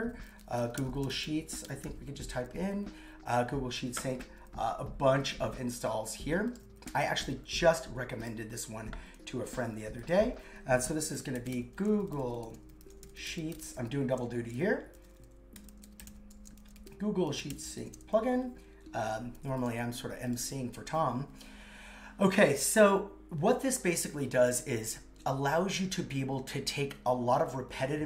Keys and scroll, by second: 11.0 shift+g, 13.0 shift+s, 14.3 shift+p, 15.7 shift+s, 16.5 shift+p, 17.7 shift+;, 17.8 shift+space, 18.1 super+v.